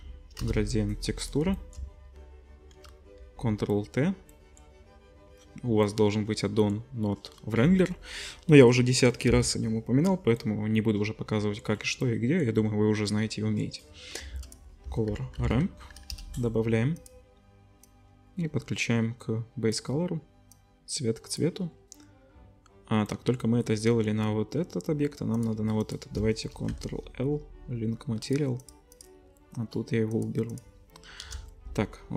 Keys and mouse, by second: 1.4 middle click, 3.2 ctrl+t, 14.3 shift+a, 17.8-25.4 drag, 25.4-25.8 shift+middle drag, 25.8 shift+click, 25.9-28.6 shift+middle drag, 26.7 ctrl+l, 28.6 click, 28.7 middle click, 28.9 middle click, 30.1-30.7 middle drag, 31.2-32.1 middle drag, 31.2 KP_0.